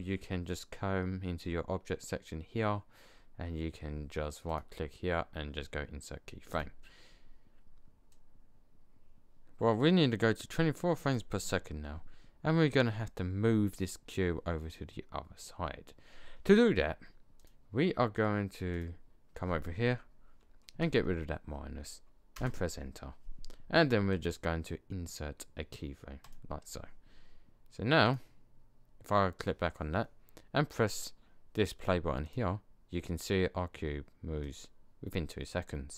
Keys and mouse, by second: 4.4-6.2 drag, 8.1-9.9 drag, 17.3 click, 20.7-23.4 middle drag, 24.0-26.1 drag, 32.7 click, 34.4-35.9 drag.